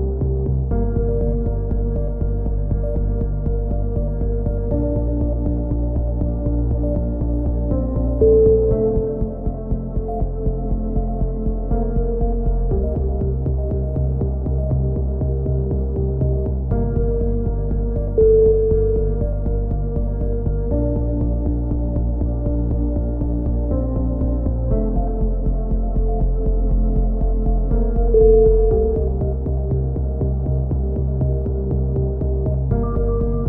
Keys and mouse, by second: 0.2 z, 1.5-2.8 right drag, 2.6 click, 2.9 right click, 4.3 a, 4.6 middle click, 7.0 middle click, 7.2 click, 8.6 click, 9.0 a, 9.2 z, 9.6 z, 9.9 middle click, 12.3-13.4 middle drag, 15.4 ctrl+r, 16.8 a, 17.1 middle click, 17.5-19.7 right drag, 19.9 a, 20.7 right click, 22.5 a, 23.0-24.0 middle drag, 24.8 ctrl+r, 26.0 a, 26.2-27.2 middle drag, 28.9-29.9 middle drag, 30.1 right click, 31.4-33.0 right drag, 32.2 middle click, 33.0 middle click.